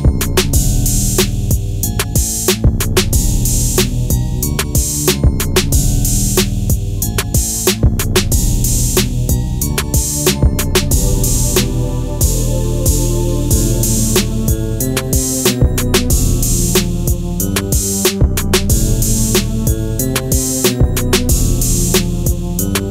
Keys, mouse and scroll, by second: 0.5-0.9 scroll up 1, 0.9 ctrl+z, 2.4-6.5 drag, 6.5-7.6 scroll up 1, 7.8 scroll down 1, 10.7 scroll down 1, 17.1 right click, 20.1 click, 22.2 typing.